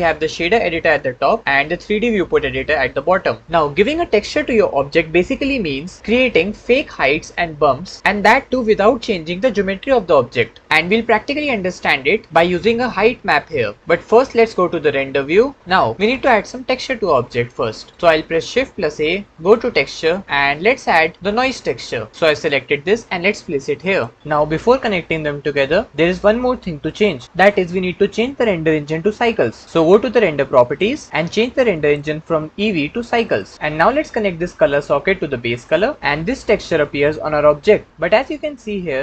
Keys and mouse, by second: 18.6 shift+a, 30.5 click, 31.7-33.5 drag, 34.5-35.6 drag.